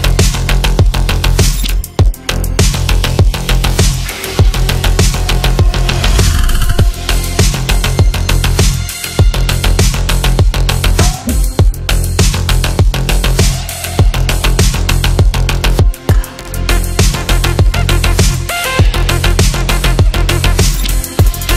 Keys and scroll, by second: 17.6 F3, 18.0 Escape.